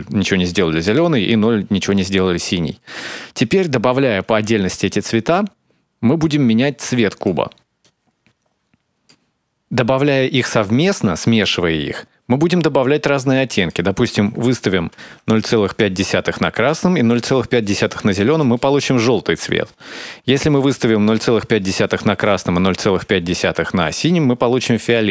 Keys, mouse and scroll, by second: 4.6 click, 7.6 click, 8.6 click, 11.3 click, 13.3 click, 16.4 click, 20.9 click, 22.2 click.